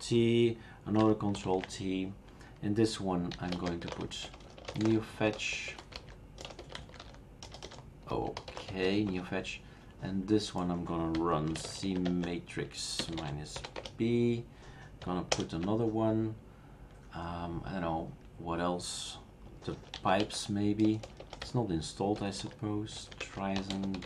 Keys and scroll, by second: 1.4 ctrl+alt+t, 3.1-9.3 typing, 10.9-13.7 typing, 13.7 Return, 15.4 super+Return, 19.5-21.0 typing, 22.1-24.0 typing.